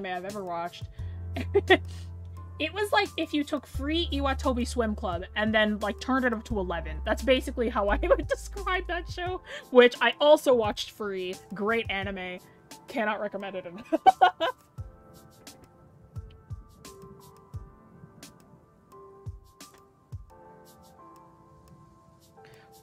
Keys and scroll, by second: 12.3 scroll down 1, 20.9-21.5 scroll up 1, 22.7-22.8 scroll up 1.